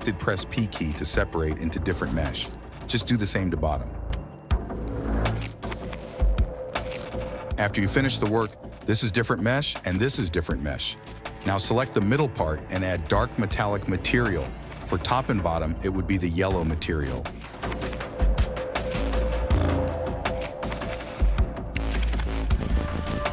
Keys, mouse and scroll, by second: 1.9 middle click, 3.7 ctrl+KP_Add, 3.8 ctrl+KP_Add, 4.0 ctrl+KP_Add, 4.1 ctrl+KP_Add, 4.4 ctrl+KP_Add, 4.6 middle click, 5.3 middle click, 5.9 ctrl+KP_Add, 6.1 ctrl+KP_Add, 6.4 ctrl+KP_Add, 6.5 ctrl+KP_Add, 6.9 p, 7.4 Tab, 9.5 middle click, 10.6 middle click, 11.6 middle click, 12.3 middle click, 12.8 middle click, 13.9 middle click, 14.3 middle click, 15.6 click, 16.5 click, 18.1 click, 19.1 click, 19.6 click, 21.2 middle click, 22.7 click.